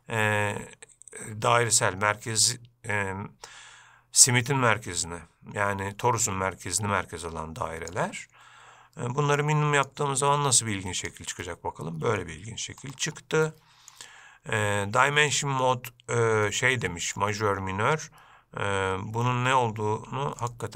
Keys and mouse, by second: 9.7 click, 10.9 click, 11.7-12.5 middle drag, 13.7-14.2 middle drag, 15.7-19.8 drag.